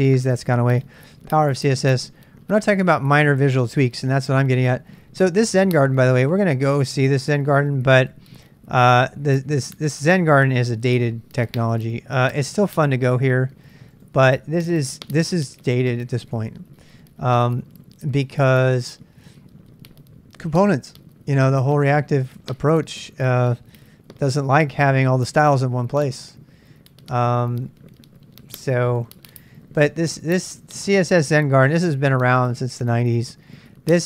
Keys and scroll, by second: 15.4 super+Tab, 16.3 super+Tab, 26.9 Return.